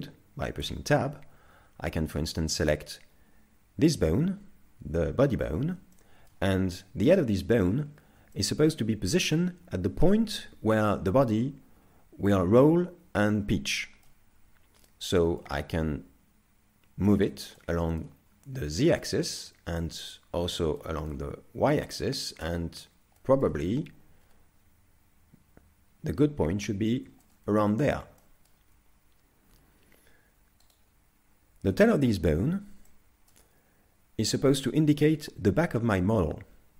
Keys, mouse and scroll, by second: 0.6 Tab, 2.6 right click, 6.0 shift+middle click, 7.7-8.3 scroll up 3, 8.3 shift+middle click, 13.7 shift+middle click, 15.4 click, 17.6 shift+middle click, 19.1 click, 20.4 scroll down 3, 20.8 shift+middle click, 21.9 click, 23.2 shift+middle click, 24.2-24.9 scroll up 3, 26.8 scroll down 3, 27.2 shift+middle click, 28.2 shift+middle click, 29.5 z, 30.7 right click, 32.9 shift+middle click.